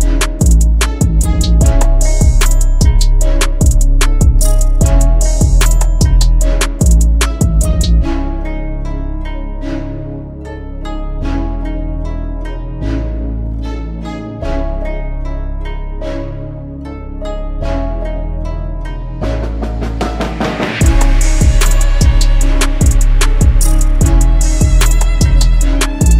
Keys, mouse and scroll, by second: 3.8-5.2 typing, 6.3 double click.